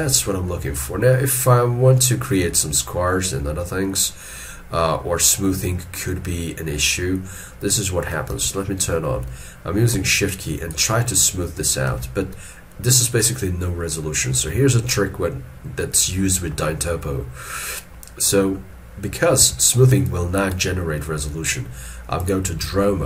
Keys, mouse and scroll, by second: 0.0 shift+middle click, 10.4 shift+click, 12.0 alt+e, 16.2 shift+middle click, 19.4 alt+e, 20.1 shift+click.